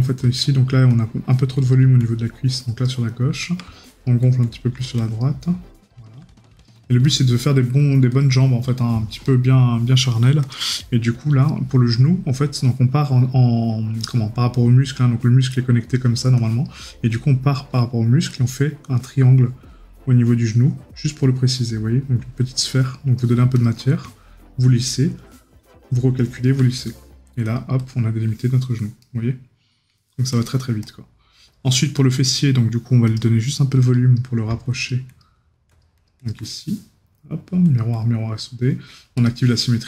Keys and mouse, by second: 29.0 right click.